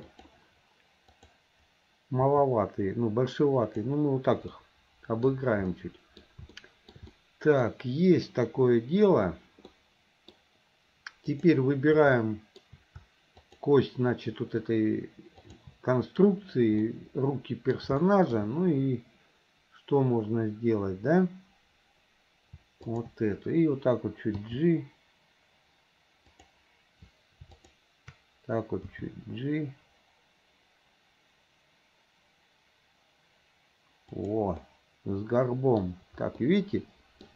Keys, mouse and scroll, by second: 1.1 click, 3.1 g, 4.6 scroll up 1, 4.7 middle click, 5.7 middle click, 6.2 scroll down 1, 6.6 shift+scroll up 1, 6.7 shift+middle click, 7.2 scroll up 1, 7.2-7.7 middle drag, 9.8-10.4 middle drag, 11.3 click, 12.2-12.6 shift+middle drag, 13.4 shift+click, 15.4 shift+click, 16.9-17.7 middle drag, 18.0 shift+middle click, 23.0 shift+click, 24.5 g, 27.7 shift+click, 29.0 g, 34.6-35.9 middle drag, 36.5-37.3 middle drag.